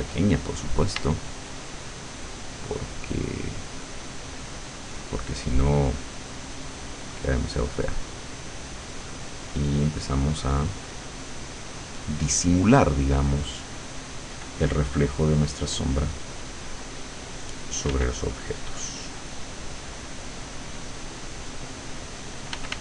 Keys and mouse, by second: 1.0 d, 1.7-4.7 drag, 5.0-14.3 drag, 15.1 click, 16.3-17.9 drag, 17.9 f, 18.2-22.6 drag, 22.5 f.